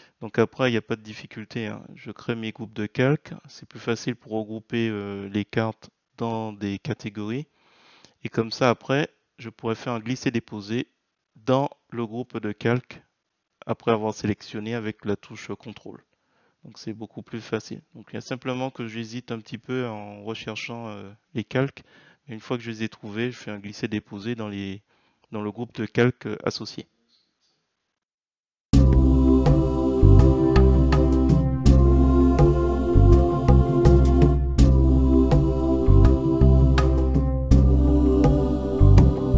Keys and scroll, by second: 1.6 ctrl+c, 3.0 ctrl+v, 3.3 Return, 4.9 ctrl+c, 6.9 ctrl+v, 7.3 Return, 38.6 3, 38.7 shift+Tab.